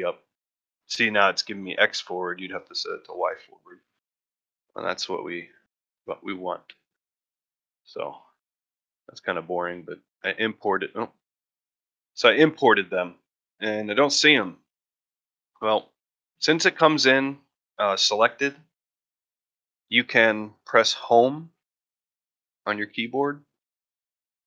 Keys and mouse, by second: 9.3-10.3 shift+middle drag, 10.8-11.3 shift+middle drag, 11.6 shift+middle drag, 12.0 shift+middle drag, 22.2 Home.